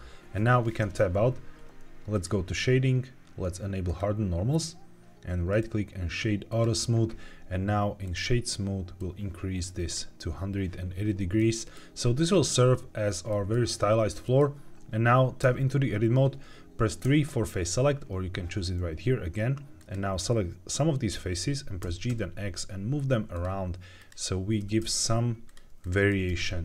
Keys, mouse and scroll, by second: 0.7 Tab, 2.0-5.4 drag, 5.4-6.5 right drag, 7.9-8.5 drag, 8.9 click, 11.3 middle click, 12.2 scroll down 2, 13.2 middle click, 13.2 scroll down 1, 14.1 middle click, 15.4 Tab, 16.9 3, 19.7 click, 21.8 g, 22.0 x, 23.2 click, 23.9 click, 24.5 g, 24.7 x, 25.4 click, 26.0 g, 26.2 x.